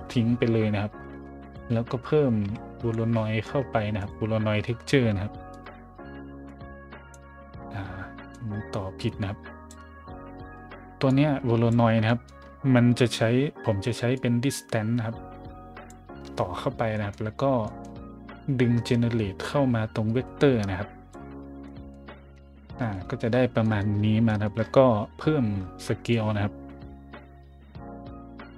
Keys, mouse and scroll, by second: 1.3 shift+a, 1.4 click, 2.4 v, 2.8 o, 4.0 click, 5.5 click, 6.4 click, 7.6 scroll down 1, 8.3-9.7 drag, 11.1-11.7 drag, 12.1-12.8 scroll up 2, 14.1-15.9 drag, 16.4 middle drag, 16.4 scroll up 1, 16.9 middle click, 17.3 scroll down 1, 17.6 middle click, 18.8-21.1 drag, 21.6 middle drag, 22.1 middle click, 22.4 middle click, 22.7 shift+middle drag, 23.6 middle click, 24.0-25.6 scroll up 3, 25.6 scroll up 1, 26.1-28.5 drag.